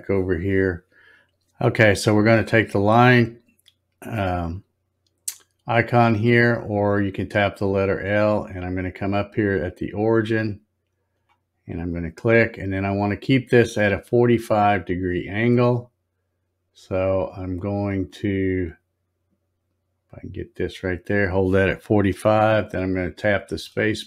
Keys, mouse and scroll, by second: 2.8 click, 11.1 click, 23.5 space.